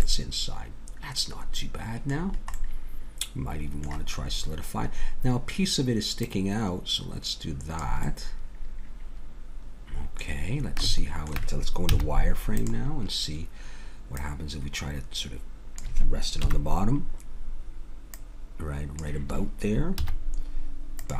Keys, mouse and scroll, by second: 0.1-2.0 middle drag, 2.2-4.3 middle drag, 6.2-8.0 drag, 8.0 middle click, 9.0-10.1 middle drag, 10.5-11.9 middle drag, 11.9 z, 14.9-16.1 drag, 16.4 KP_1, 18.1-19.8 drag, 20.0 z.